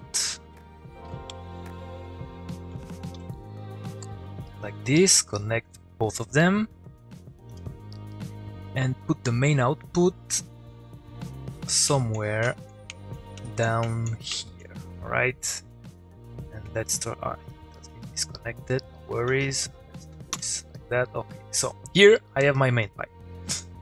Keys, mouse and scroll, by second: 1.0 shift+n, 1.3 shift+space, 1.4 shift+o, 2.7 shift+p, 4.4 click, 5.3 shift+click, 7.5 u, 7.7 click, 8.1 middle click, 9.2-11.1 drag, 17.7 middle click, 18.8 click, 19.4 shift+click, 20.3 y, 20.7 click, 21.0 middle click, 22.2 middle click.